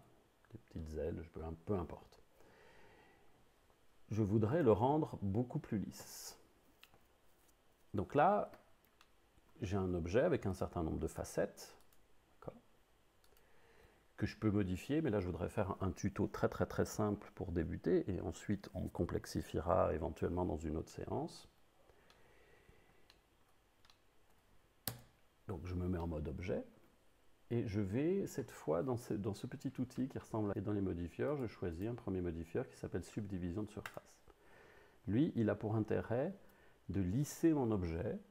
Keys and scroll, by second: 11.2 Tab, 25.9 Tab.